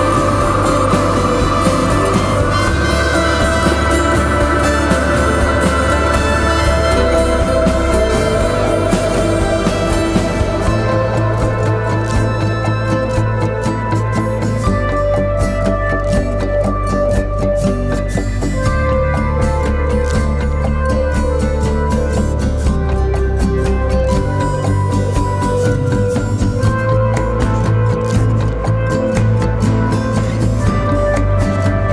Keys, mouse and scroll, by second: 3.4-3.8 typing, 4.1 double click, 6.9 typing, 8.8 double click, 20.7 alt+click, 28.2 right click, 29.5 double click.